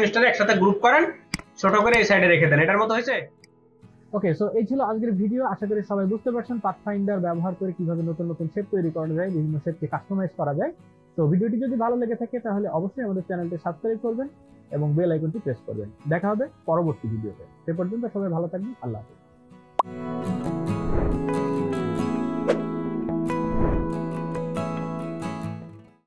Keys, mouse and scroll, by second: 0.3 ctrl+g.